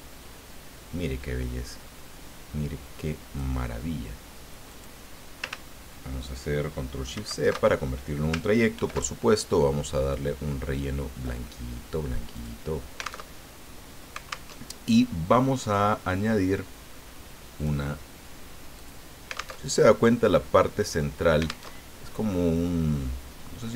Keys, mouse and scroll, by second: 4.7 click, 7.1 ctrl+shift+c, 8.7 ctrl+shift+f, 10.1-11.4 drag, 12.3 click, 13.4 alt+Tab, 14.5 alt+Tab, 17.6 click, 18.7 click, 19.6 alt+Tab, 21.7 alt+Tab.